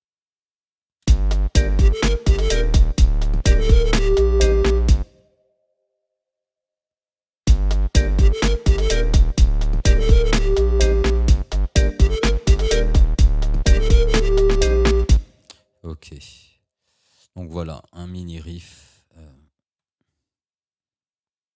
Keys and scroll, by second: 1.1 space, 5.0 space, 7.5 space, 15.1 space.